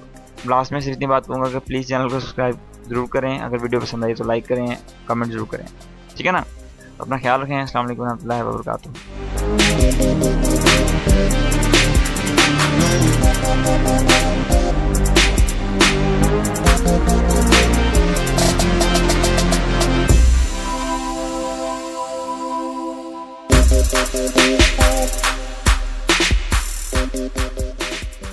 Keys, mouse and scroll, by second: 7.1-7.7 drag.